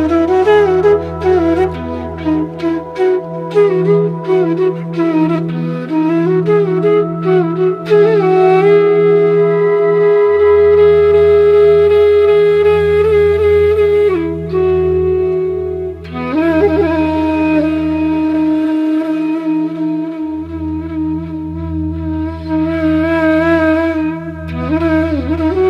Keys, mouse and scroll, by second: 0.9 click, 5.0 click, 5.9 click, 9.2-15.2 drag, 16.4 click, 23.1 click.